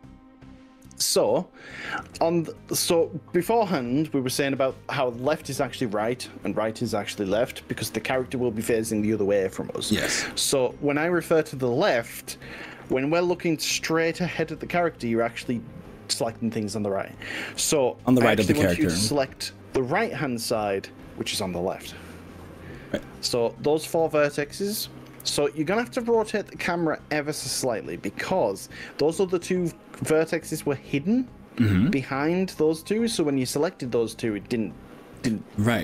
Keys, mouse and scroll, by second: 18.3 click, 19.3 click, 22.7-23.1 drag, 26.8-33.5 middle drag, 34.2-35.8 drag.